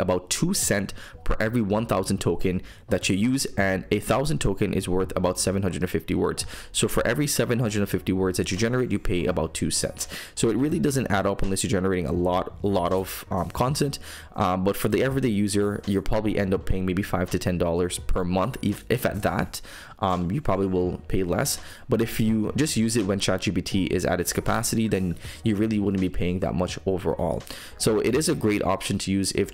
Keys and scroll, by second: 0.9 super+m.